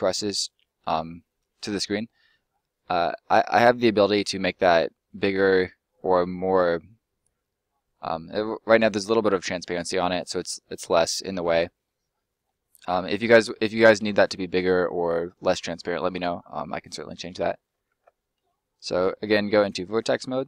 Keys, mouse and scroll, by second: 2.4 middle click, 10.0 middle click, 14.7 middle click, 19.5 click, 20.0 scroll up 1.